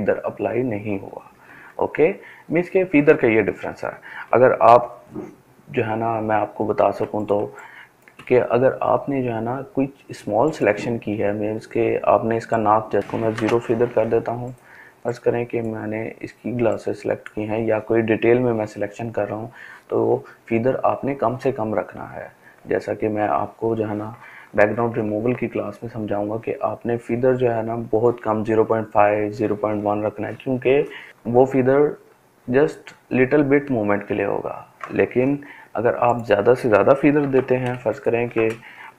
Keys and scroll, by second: 1.0 ctrl+alt+z, 1.6 ctrl+alt+z, 3.2 ctrl+d, 5.6 ctrl+space, 13.0 0, 35.8 ctrl+d.